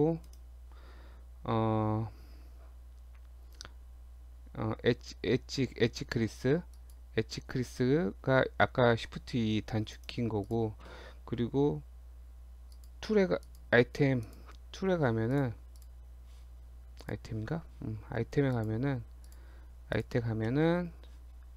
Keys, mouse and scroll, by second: 0.3 right click, 10.5 click, 12.7 click, 14.3 click, 15.3 click, 17.0 click, 18.5 click, 19.9 shift+click, 20.5 middle click.